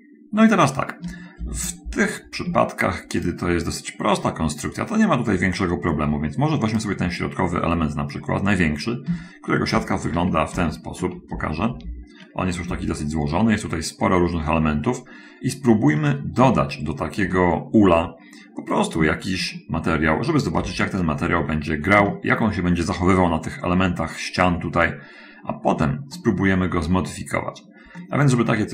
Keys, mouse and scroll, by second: 1.5 shift+F5, 2.9 Tab, 3.7 click, 7.2 click, 9.4 Tab, 10.6 a, 11.9 shift+F10, 13.1 a, 16.5 Tab, 17.7 Tab, 20.9 shift+F5, 21.9 middle click, 22.5 shift+middle click, 26.6-28.3 drag, 28.4-28.7 middle drag.